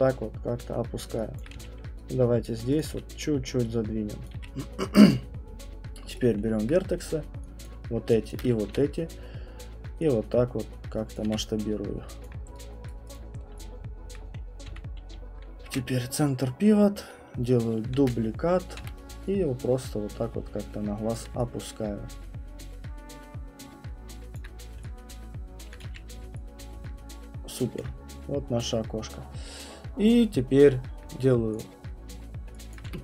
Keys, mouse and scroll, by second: 0.6 click, 1.4 alt+click, 1.5 q, 2.4 right click, 2.8 click, 2.9 w, 4.2 click, 4.3 q, 4.8 middle click, 6.2 right click, 6.2 middle click, 6.6 alt+click, 7.6 click, 8.7 r, 11.2 click, 11.3 q, 12.2 alt+click, 12.9 right click, 13.1 click, 13.5 middle click, 13.6 right click, 14.1 alt+click, 14.1 middle click, 14.7 w, 15.4 right click, 15.6 ctrl+c, 18.0 ctrl+d, 18.8 w, 21.1 click, 24.4 alt+click, 24.6 middle click, 25.8 click, 25.8 q, 27.8 alt+click, 31.6 click, 32.2-32.7 scroll, 32.7 alt+click, 32.9 w.